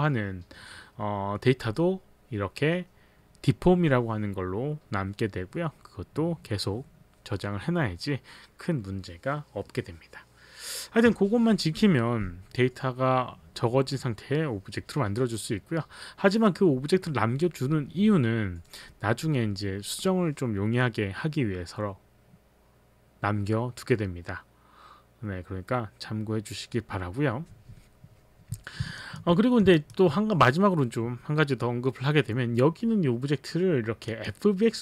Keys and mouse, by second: 29.0 alt+click, 29.8 alt+click, 30.2 alt+middle click, 30.6 alt+middle click, 34.1 click.